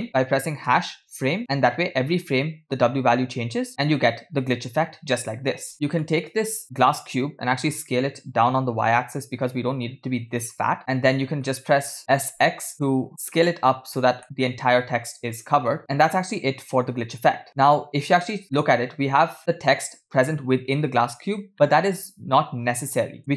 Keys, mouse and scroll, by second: 3.7 space, 5.7 space, 5.7 click, 6.0 middle click, 7.6 s, 10.8-11.5 middle drag, 10.8 KP_0, 11.8 middle click, 12.2 s, 14.2-15.8 middle drag, 17.1 space, 17.5 middle click, 17.5-17.9 scroll down 3, 18.3 click, 18.6-19.1 middle drag, 19.6 middle click, 21.5-23.2 middle drag.